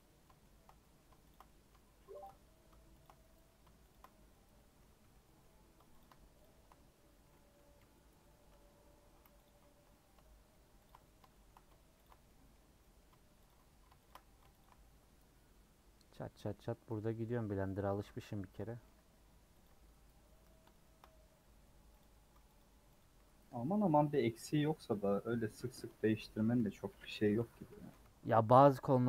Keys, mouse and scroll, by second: 1.3 shift+click, 1.4-3.2 middle drag, 3.9 shift+click, 4.5 middle click, 5.0 3, 5.2 middle click, 9.4 alt+click, 9.9 middle click, 10.8 alt+shift+click, 11.0-12.0 shift+middle drag, 12.0 alt+shift+click, 12.2-14.6 middle drag, 14.6 alt+shift+click, 15.8-16.3 scroll down 2, 16.0 middle click, 16.3 middle click, 17.0 scroll up 2, 17.2-19.6 middle drag, 20.1 scroll down 4, 20.4 middle click, 21.1 scroll up 1, 21.7 scroll up 3, 22.6 alt+click, 23.0 alt+click, 23.6-24.7 middle drag, 24.7 scroll down 2, 24.9 middle click, 25.5-26.0 scroll up 2, 26.0-27.1 shift+middle drag, 27.1 c, 27.3 a, 27.5 a, 28.0 3, 28.6 click.